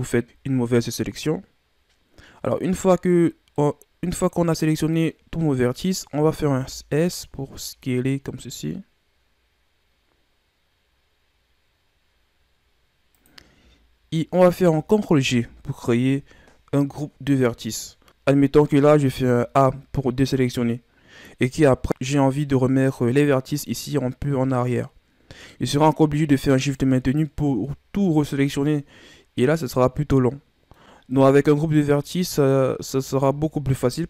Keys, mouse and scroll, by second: 2.5-6.5 middle drag, 6.5 s, 15.2 ctrl+g, 19.0 a, 21.5-24.8 middle drag, 25.4-26.6 middle drag, 26.6 right click, 27.0 shift+right click, 27.6-31.8 middle drag, 31.8 Tab, 32.8 Tab.